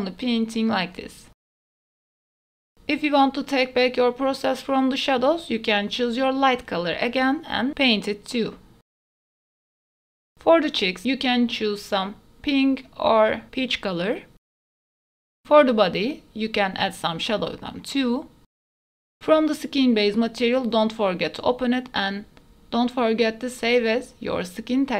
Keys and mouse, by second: 0.2-1.5 drag, 1.5 shift+middle click, 1.8 click, 2.2 f, 2.8-4.0 middle drag, 4.0-6.4 drag, 4.9 f, 6.4 middle click, 6.8 click, 7.0 middle click, 7.6 shift+middle click, 8.2 click, 8.4 middle click, 8.6 click, 9.3 ctrl+s, 9.3 right click, 12.0 middle click, 12.4 f, 13.2 click, 13.6 middle click, 15.4 middle click, 15.7 click, 16.6 middle click, 16.9 click, 17.3 middle click, 17.6 click, 17.9 middle click, 18.8 ctrl+z, 18.8 middle click, 19.1-22.7 middle drag, 23.9 ctrl+s.